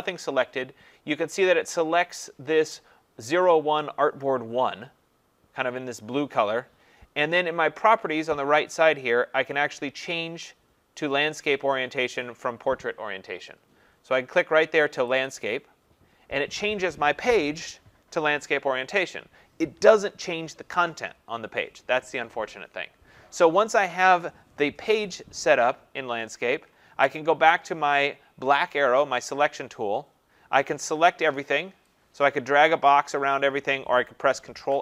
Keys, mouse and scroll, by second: 20.3 click, 28.8 click, 33.1 click, 34.5 ctrl+a.